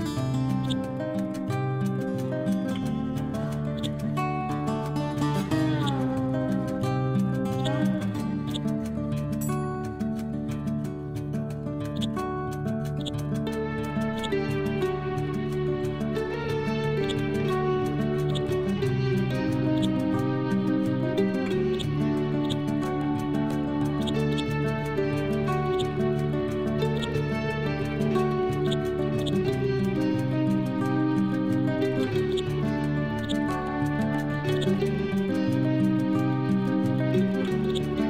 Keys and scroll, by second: 19.3 l, 29.8 Down, 35.3 ctrl+g, 35.7 ctrl+c.